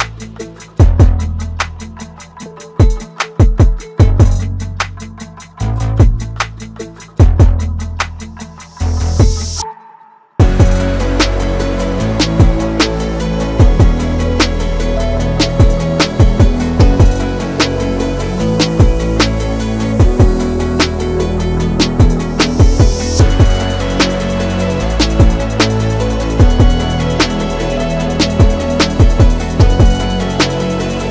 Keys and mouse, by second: 3.4 click, 3.9 click, 3.9 right click, 6.2 shift+click, 8.0 click, 8.7 shift+click, 10.2 alt+e, 13.6 middle click, 14.3 shift+middle click, 16.0 alt+3, 16.0 alt+click, 17.1 alt+shift+click, 17.7-20.2 middle drag, 20.6 alt+e, 25.0 Tab, 25.5-26.0 drag, 26.8 shift+click, 26.9 shift+middle click, 27.1-28.3 middle drag, 28.6 middle click, 29.1-29.5 middle drag, 29.7 shift+middle click, 30.8 shift+middle click.